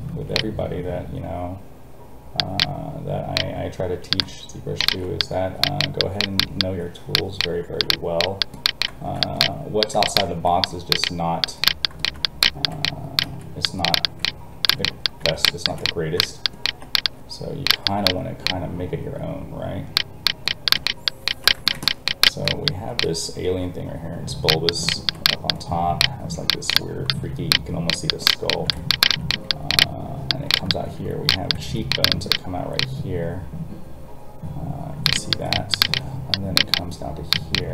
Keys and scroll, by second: 0.1 alt+a, 10.3 alt+a, 13.2 alt+a.